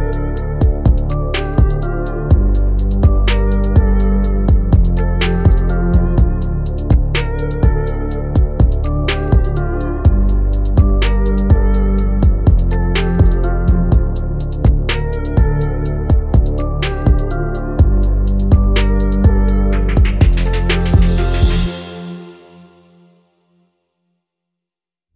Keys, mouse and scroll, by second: 0.1 right click, 0.4 scroll up 2, 3.7 space, 3.9-5.0 scroll down 5, 4.3 click, 4.6 right click, 5.2-5.8 scroll up 3, 5.8 g, 6.8 scroll down 2, 7.0 right click, 7.6 space, 8.3 space, 8.6 click, 9.1 scroll up 2, 9.6 r, 11.4 click, 11.8 r, 13.0 space, 14.3 space, 15.0 g, 16.2 r, 18.1 space, 18.8 click, 22.0 space, 22.8 click, 23.5 g, 24.3 r.